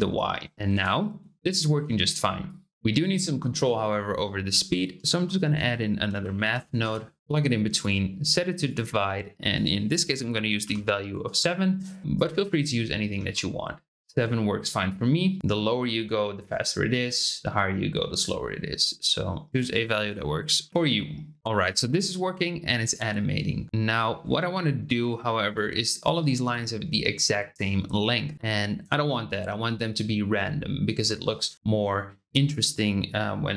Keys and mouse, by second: 0.7 space, 2.4 click, 4.5 space, 5.1 shift+a, 7.8 click, 9.5-11.7 drag, 12.1 click, 13.1 space, 15.4-19.5 drag, 19.7-20.7 drag, 21.4 space, 25.7 shift+middle click.